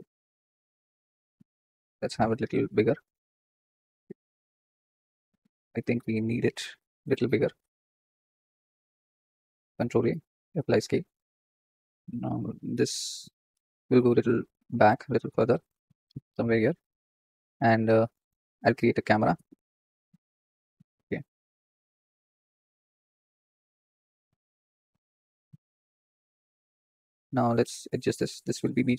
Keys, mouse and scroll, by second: 0.8 scroll down 3, 2.2 s, 3.4 Tab, 4.0 click, 5.5 click, 6.0 s, 6.7-7.7 scroll down 5, 7.7 s, 10.2 ctrl+a, 11.0-11.6 scroll up 7, 11.6 click, 12.0 click, 12.1 scroll down 4, 12.4-13.3 middle drag, 13.3 g, 17.0 click, 17.5-17.8 scroll down 2, 20.2 shift+a, 21.2 g, 23.7 s, 27.7 click.